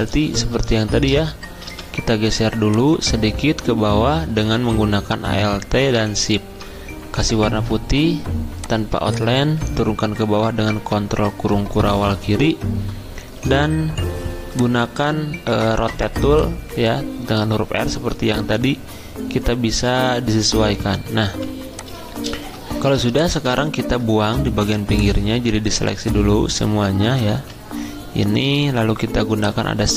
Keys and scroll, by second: 7.2 d, 10.9 ctrl+[, 13.4 r, 21.2 v, 23.0 space, 27.3 ctrl+z.